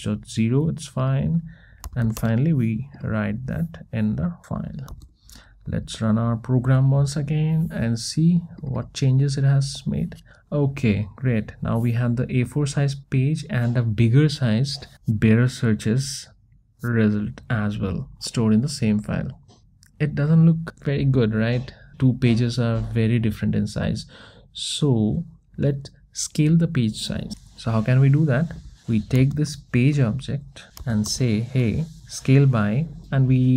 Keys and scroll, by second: 31.1 Return.